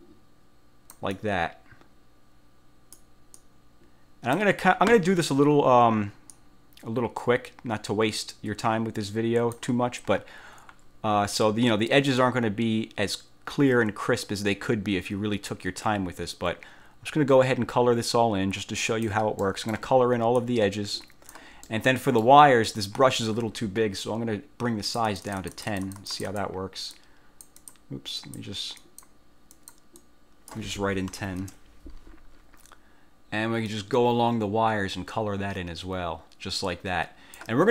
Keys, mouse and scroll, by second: 3.5-4.7 drag, 6.5-9.9 drag, 12.3-19.4 drag, 19.5 middle click, 20.5-21.6 drag, 21.8 middle click, 25.0 click, 27.1 click, 28.3 click, 28.9 click, 29.7 click, 31.0-31.9 typing, 33.8-37.7 drag.